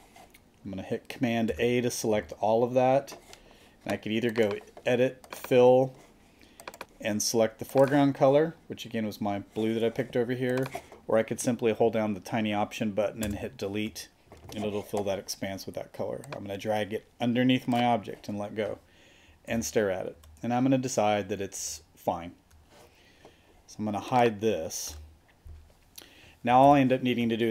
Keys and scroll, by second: 1.5 super+a, 13.2 alt+BackSpace, 19.5 super+-, 21.6 super+=, 24.9 super+d, 26.6 super+-.